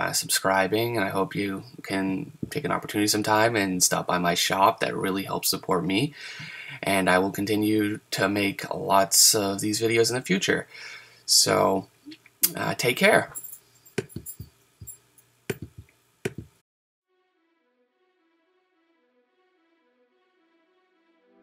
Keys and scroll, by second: 5.0 super+z, 20.1 super+z.